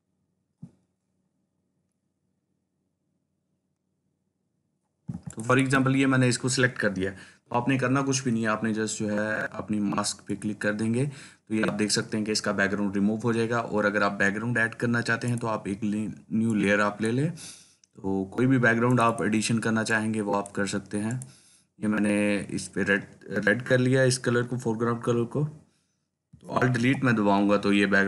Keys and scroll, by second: 26.8 alt+Delete.